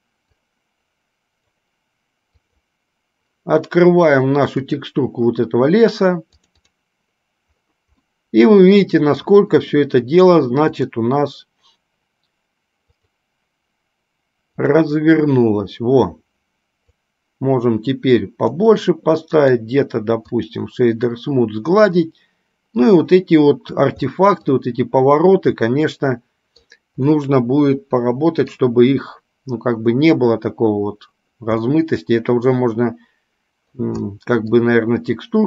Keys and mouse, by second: 11.1 click, 15.1 click, 17.2-18.9 drag, 22.2-23.1 middle drag, 24.2-24.9 middle drag, 25.9-27.0 middle drag, 27.4-28.9 middle drag, 31.9-34.0 middle drag, 34.4-34.9 middle drag.